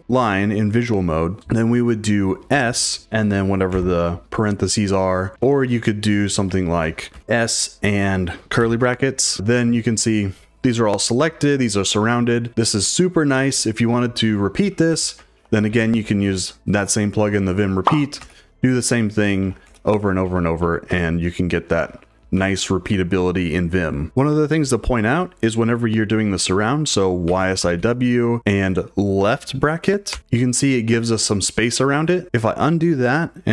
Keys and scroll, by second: 2.5 s, 3.7 shift+9, 6.1-9.4 typing, 14.4-16.2 typing, 18.2-22.3 typing, 27.0-28.2 typing, 30.1 shift+9, 32.2 u.